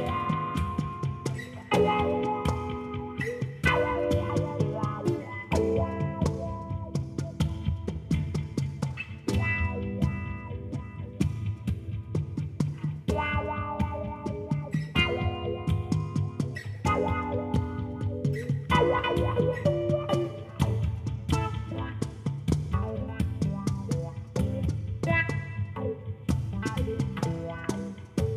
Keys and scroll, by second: 0.5 d, 1.1 4, 1.4 f, 1.8 Return, 18.3 Tab, 21.7 3, 22.0 Return.